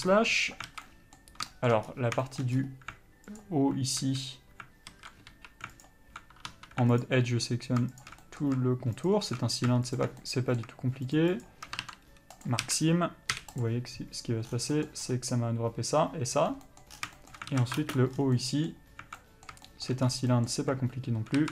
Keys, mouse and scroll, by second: 1.1 middle click, 1.7 shift+middle click, 2.1 scroll up 1, 2.5 shift+middle click, 2.8 scroll up 1, 6.1 alt+click, 7.2 alt+click, 8.2 alt+shift+click, 8.4 middle click, 10.4 middle click, 17.2 scroll down 1, 18.0 ctrl+space, 18.4-21.5 middle drag, 18.4 scroll down 1.